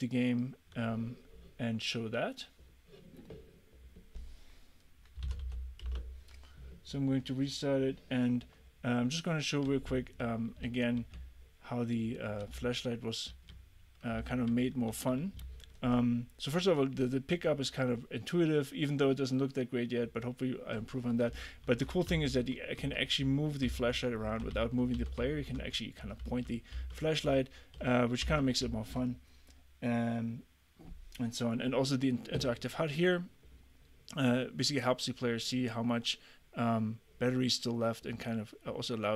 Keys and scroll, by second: 5.0-5.9 typing, 9.9 a, 10.7 d, 11.2 a, 12.6 w, 13.3 d, 14.9 w, 15.4 d, 21.7-28.7 typing.